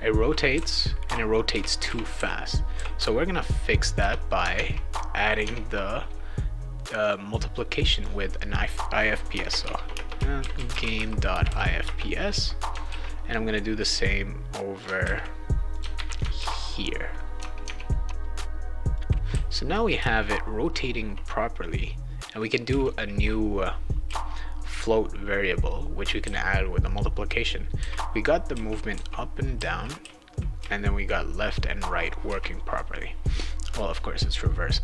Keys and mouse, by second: 0.0-2.7 typing, 4.5 alt+Tab, 5.4 alt+Tab, 7.0 click, 7.9 click, 9.3-11.9 typing, 12.8 ctrl+s, 13.9 click, 15.0 ctrl+c, 15.7 ctrl+click, 15.9 ctrl+v, 16.4 ctrl+s, 17.6 alt+Tab, 18.0 alt+Tab, 18.4 click, 18.8-19.8 typing, 18.9 click, 22.7 a, 24.0 a, 26.2 d, 27.7-30.6 typing, 33.6 click.